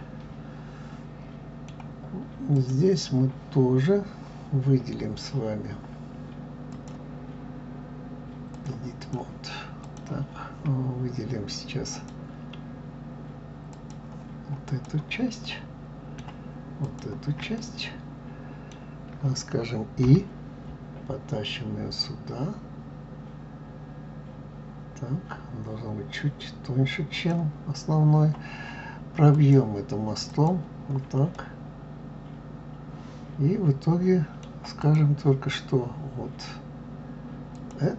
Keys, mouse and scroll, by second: 2.6 click, 6.7-9.1 drag, 9.8 click, 11.9-13.9 drag, 14.7 click, 15.4-16.8 middle drag, 16.8 shift+click, 17.6-20.0 middle drag, 29.3-31.3 drag, 31.3-34.4 middle drag, 34.8 click, 37.5 click.